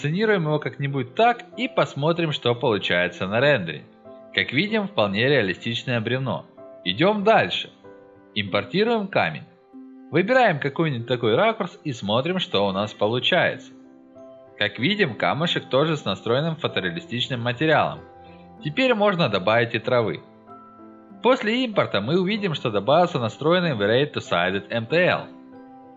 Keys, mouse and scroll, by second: 3.2 click, 4.9-5.7 drag, 6.3 scroll down 2, 7.4 click, 9.3 click, 9.5 middle click, 10.1-11.1 alt+middle drag, 11.2 alt+middle click, 12.3-12.6 scroll down 1, 16.3 click, 17.9 Escape, 18.3-18.7 scroll up 2, 18.7-20.0 scroll down 4, 20.3 click.